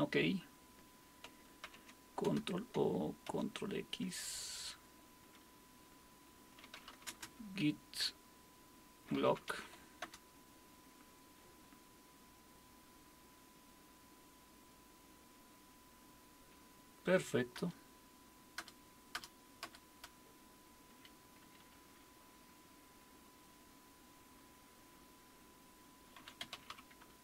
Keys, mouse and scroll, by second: 1.4-3.8 typing, 6.4-7.4 typing, 8.9-10.0 typing, 10.0 Return, 17.6 Return, 18.6 Return, 19.1 Return, 19.6 Return, 20.9 q, 25.9-27.2 typing.